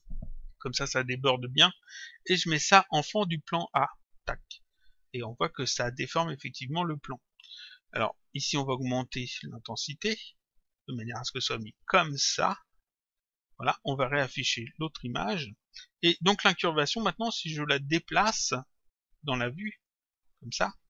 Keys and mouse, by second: 2.6 click, 5.2 click, 9.1 click, 14.4 click, 16.1 click, 17.7 click, 19.1 click.